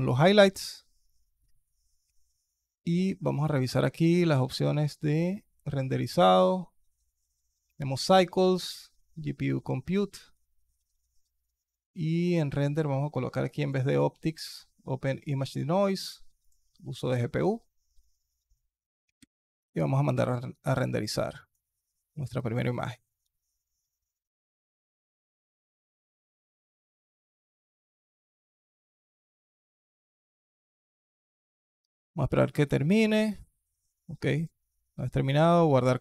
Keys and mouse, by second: 6.1 click, 12.1 click, 13.4-15.1 drag, 16.2 click, 19.2 F12.